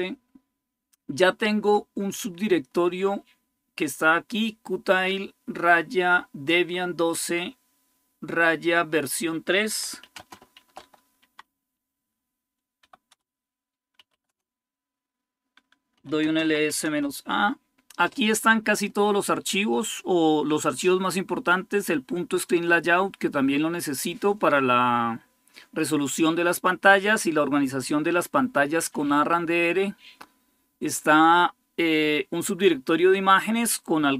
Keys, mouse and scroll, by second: 2.5-4.8 drag, 9.6-11.1 typing, 12.6-14.3 typing, 12.9 Return, 15.5-17.0 typing.